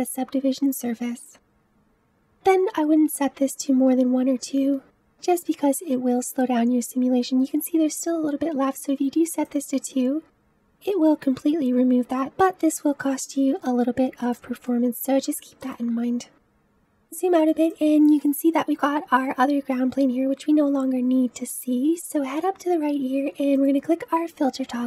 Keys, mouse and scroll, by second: 0.3-2.1 drag, 3.2 space, 8.4 space, 10.1-12.2 drag, 14.7-15.2 middle drag, 15.2-15.7 scroll down 1, 15.7-16.7 middle drag, 16.7 space, 16.9-17.6 scroll down 2, 17.6 click, 18.2-21.2 middle drag, 23.5-24.8 drag.